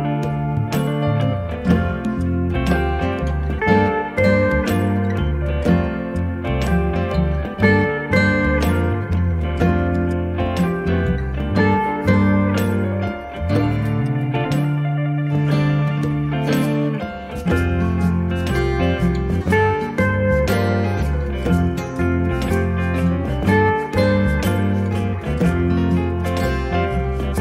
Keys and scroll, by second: 26.9 q.